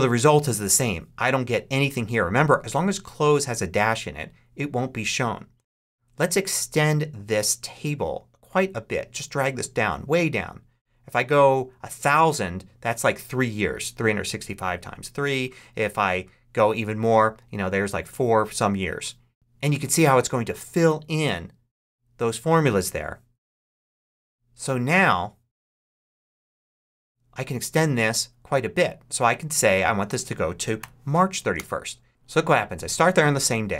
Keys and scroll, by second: 30.7 3, 31.5 Return.